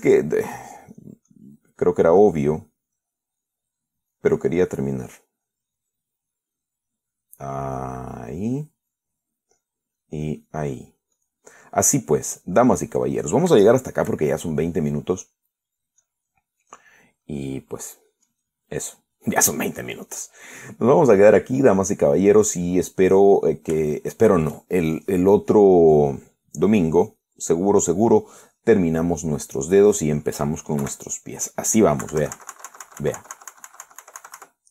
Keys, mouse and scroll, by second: 0.8 middle click, 1.8 click, 2.5 click, 4.2-5.6 drag, 5.7-8.4 middle drag, 8.7-9.7 drag, 9.8 click, 10.9 click, 11.5 click, 12.0 click, 12.4 click, 13.4 click, 13.9 click, 14.2 click, 14.9-16.0 shift+middle drag, 16.3 click, 17.9 click, 18.5 click, 19.1 click, 20.2 click, 20.7 click, 21.6 click, 23.0 click, 23.4-25.1 middle drag, 25.2 shift+middle click, 26.4 middle click, 28.7 click, 29.4-31.9 middle drag, 32.1 KP_1, 33.3 KP_Subtract.